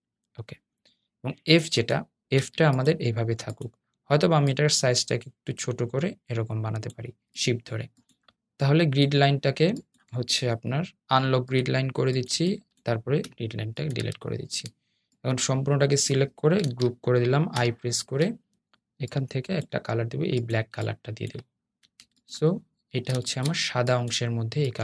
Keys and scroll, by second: 13.0 BackSpace, 17.7 super+i.